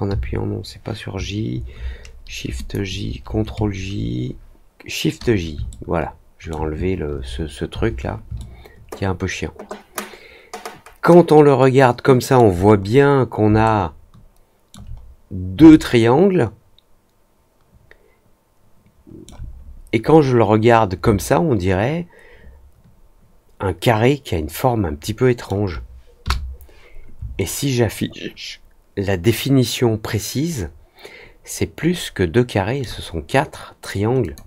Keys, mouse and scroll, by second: 2.5 click, 5.6 alt+middle click, 8.3-12.3 alt+middle drag, 13.6-14.6 alt+middle drag, 14.9 scroll down 1, 15.6-19.2 alt+middle drag, 19.2-19.7 alt+scroll down 2, 20.0 scroll up 1, 20.5 middle click, 21.1-25.4 alt+middle drag, 27.3-32.7 alt+middle drag, 34.2 click.